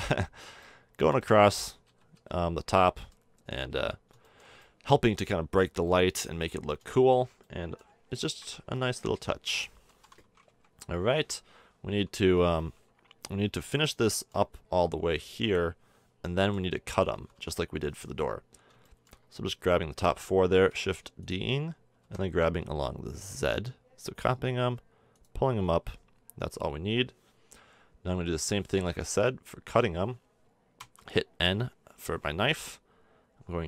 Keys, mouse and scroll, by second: 1.8 z, 2.1 z, 3.8-6.2 middle drag, 6.9 middle drag, 7.4-8.7 middle drag, 9.0 Tab, 10.4 KP_1, 12.2 l, 14.1 middle click, 15.3 a, 16.4 l, 16.8 l, 17.1 l, 17.3 l, 18.9-20.8 middle drag, 20.7 shift+d, 22.0 g, 25.7 a, 27.5 middle click, 28.2 click, 28.9-30.8 middle drag, 30.8 k.